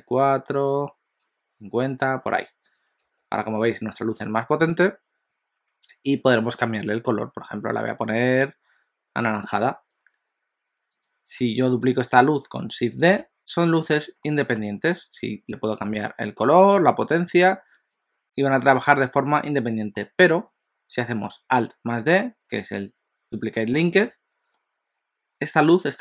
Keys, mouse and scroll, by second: 2.9 click, 3.1 g, 6.5 click, 11.0 click, 13.1 shift+d, 14.2 middle click, 16.0 click, 18.2 middle click, 20.0 middle click, 24.0 alt+d.